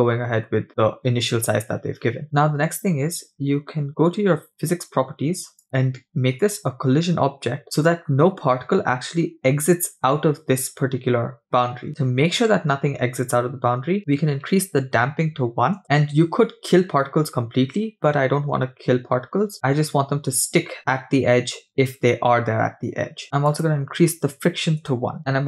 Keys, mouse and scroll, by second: 0.6-1.1 scroll down 2, 5.6 click, 14.0-15.8 drag, 14.0-15.1 scroll down 1, 23.5-25.0 drag.